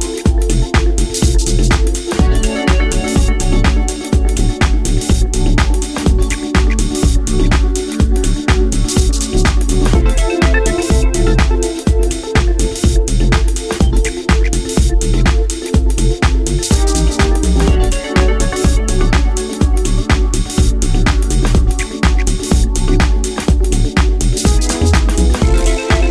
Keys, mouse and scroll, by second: 7.6-8.9 scroll down 2, 8.9 scroll down 1, 10.4 click, 11.3-11.7 scroll up 1, 12.1 scroll up 1, 12.5 s, 14.6 click, 14.9 g, 16.5 click, 17.6-18.0 scroll up 2, 18.0 shift+middle click, 18.6-19.2 scroll up 4, 19.5 middle click, 21.0 KP_7, 22.2 shift+middle click, 23.7 s, 25.8 click.